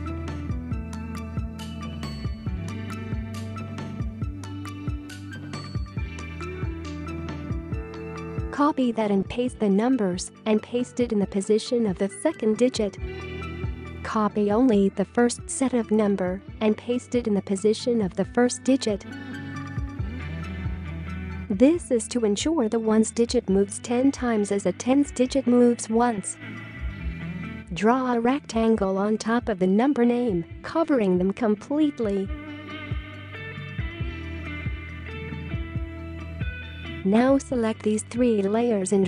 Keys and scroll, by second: 9.7 ctrl+v, 11.3 ctrl+a, 22.3 ctrl+c, 26.1 ctrl+v, 35.1 v.